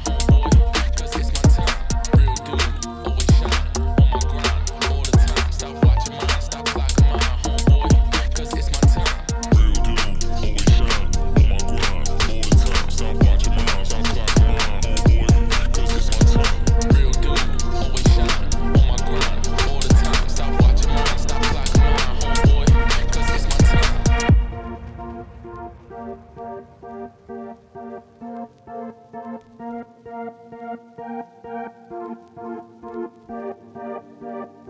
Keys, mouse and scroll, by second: 0.6 Tab, 0.9 s, 3.2 e, 3.7 s, 5.9 scroll up 1, 6.1 shift+middle click, 6.2 ctrl+b, 7.5 alt+click, 7.7 scroll up 2, 7.8 ctrl+b, 8.8 alt+click, 9.0 alt+click, 9.2 ctrl+b, 9.9 alt+click, 10.0 middle click, 10.3 ctrl+b, 11.0 Tab, 11.2 ctrl+1, 11.6 right click, 11.8-12.1 scroll down 2, 12.1 click, 12.3-13.5 middle drag, 13.5 click, 14.1 shift+d, 15.1 Tab, 15.4 3, 15.6 click, 16.0-16.6 ctrl+KP_Add, 17.1 g, 18.1 Tab, 18.3 g, 20.2 shift+right click, 21.0 shift+a, 21.1 Tab, 21.2 s, 23.7 ctrl+b, 25.8 alt+Left, 26.0 e, 27.1 e, 27.5 3, 27.7 alt+Left, 28.4 alt+e, 29.5 scroll up 2, 29.8 middle click, 30.2 ctrl+b, 31.5 2, 31.7 alt+Left, 32.2 ctrl+b, 34.1 alt+Left, 34.2 ctrl+b.